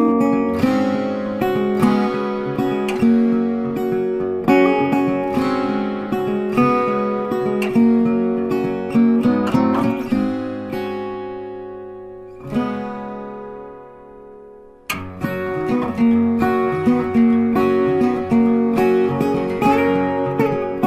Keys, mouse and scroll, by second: 9.9 ctrl+a, 10.8 click, 14.0 click.